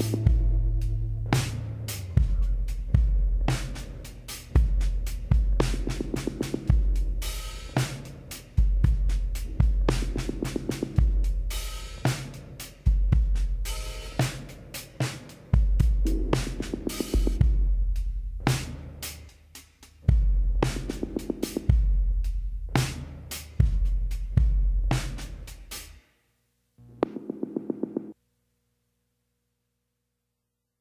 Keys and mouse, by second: 2.7-4.4 drag, 6.3 x, 7.6-9.2 middle drag, 8.4 z, 9.2-10.9 drag, 10.0 l, 11.9-13.5 drag, 14.0 s, 18.9 s, 20.7-24.4 drag, 24.4 e, 29.6 e.